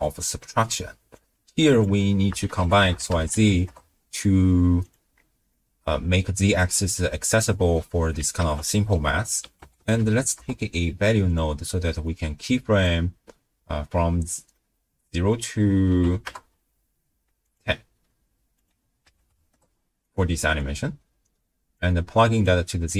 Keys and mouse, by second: 1.1-4.9 drag, 5.5 middle click, 8.4 ctrl+a, 12.0 right click, 14.2 middle click, 15.4 right click, 17.5 right click, 18.5-19.5 right drag, 20.0 right click, 21.8-22.5 drag.